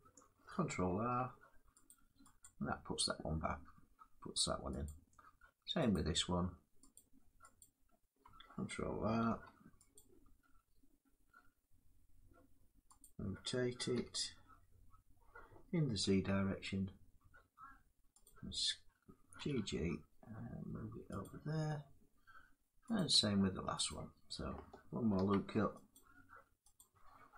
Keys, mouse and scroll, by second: 0.5 ctrl+r, 1.5 click, 2.1 click, 4.5 click, 5.5 click, 6.6 click, 7.2 click, 8.9 ctrl+r, 9.6 click, 12.7 click, 13.6 r, 15.7 z, 18.1 click, 19.1 g, 19.2 g, 20.1 g, 20.9 click, 22.7 click, 23.6 click, 24.8 ctrl+r, 25.6 click, 26.6 click.